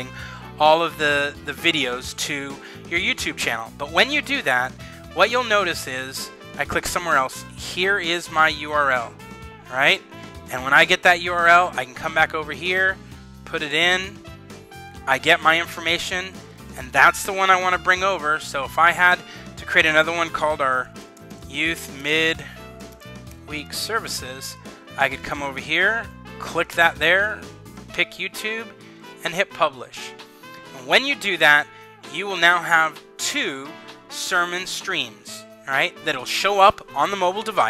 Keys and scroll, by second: 10.4 super+c, 12.5 super+v, 17.5 super+c, 18.6 super+c, 20.4-23.9 typing, 25.9 typing.